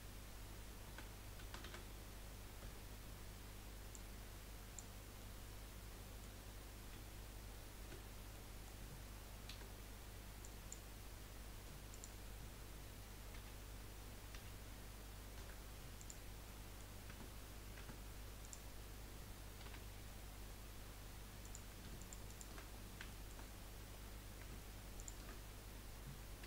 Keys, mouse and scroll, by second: 0.8 a, 1.4 a, 1.6 a, 2.6 b, 5.2-7.1 middle drag, 7.1 z, 8.4-9.6 middle drag, 9.6 Delete, 11.9 click, 13.3 l, 14.3 l, 15.3 p, 16.4 middle click, 17.0 Tab, 17.8 Tab, 18.4 click, 19.6 2, 19.9-21.4 scroll up 4, 21.4 click, 22.0 alt+shift+click, 22.3 alt+shift+click, 22.7 scroll down 4, 23.1 shift+middle click, 23.5-24.5 scroll up 4, 24.9 alt+shift+click.